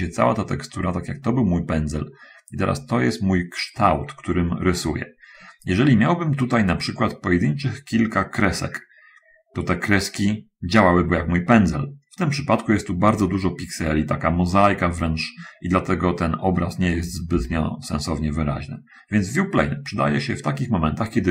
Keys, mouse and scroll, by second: 2.7 scroll down 1, 17.7 ctrl+z.